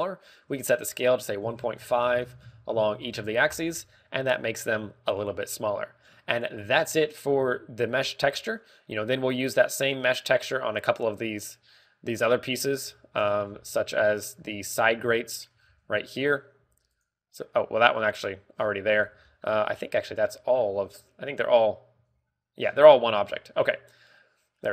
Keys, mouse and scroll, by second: 1.1 ctrl+click, 2.8 ctrl+click, 6.9-7.9 scroll down 11, 7.9 shift+middle click, 8.3 scroll up 4, 9.1 scroll up 2, 9.4 scroll down 4, 10.0 scroll up 1, 12.1 middle click, 14.1 KP_0, 15.0-15.5 scroll down 3, 15.4 middle click, 15.8 z, 16.0 shift+middle click, 16.4 scroll down 1, 16.6-17.4 scroll up 4, 16.9 shift+middle click, 17.5 z, 18.1 right click, 18.7 z, 19.5-19.9 scroll down 2, 19.9 z, 20.2 shift+middle click, 20.5 middle click, 21.0 z, 21.7 scroll up 2, 22.5 right click, 22.5 scroll up 1, 23.5-24.3 scroll down 7, 23.5 z, 24.0 z, 24.5 middle click.